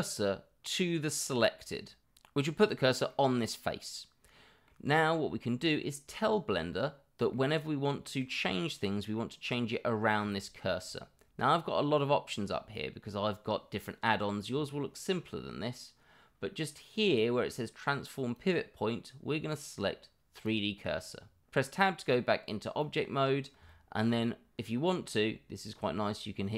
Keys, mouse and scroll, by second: 2.2-2.8 middle drag, 4.1-4.7 middle drag, 6.2-7.3 middle drag, 8.8 middle click, 10.3-10.7 middle drag, 18.3-20.5 drag, 21.5-21.8 middle drag, 23.0-23.3 middle drag, 23.3 click, 23.7-24.1 middle drag, 25.1-25.7 middle drag.